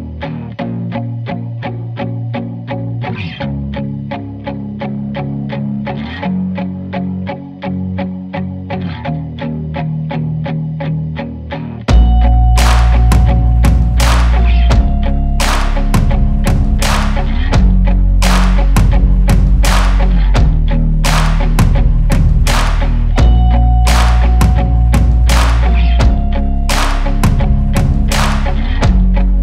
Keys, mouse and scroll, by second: 10.4 Return, 11.5-26.7 drag, 28.5-29.4 drag.